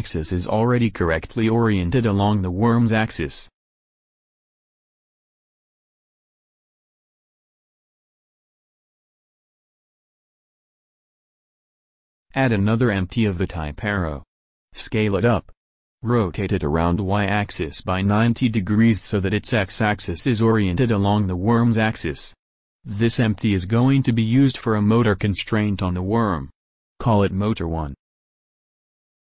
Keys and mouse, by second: 3.6-8.7 drag, 10.8-12.6 drag, 12.6 shift+a, 15.7 shift+a, 17.8 s, 24.3 r.